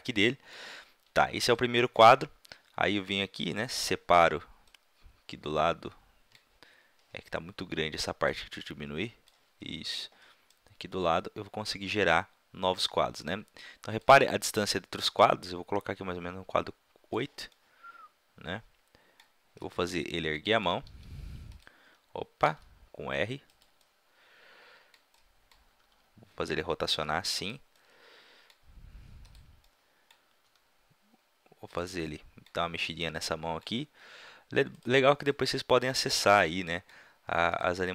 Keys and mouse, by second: 8.2-10.1 drag, 10.5 click, 15.2 click, 17.6 middle drag, 18.6 middle click, 19.7-20.4 drag, 20.9 g, 22.5 r, 23.5-24.0 drag, 24.7-25.7 middle drag, 25.7 r, 29.3-29.8 middle drag, 30.5 r, 31.7-32.1 drag, 33.7 r, 34.8-35.3 drag, 35.3-36.7 middle drag, 37.5-37.9 drag.